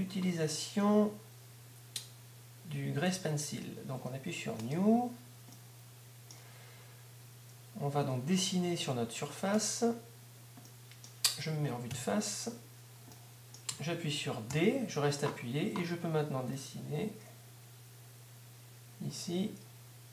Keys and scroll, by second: 14.9 shift+d.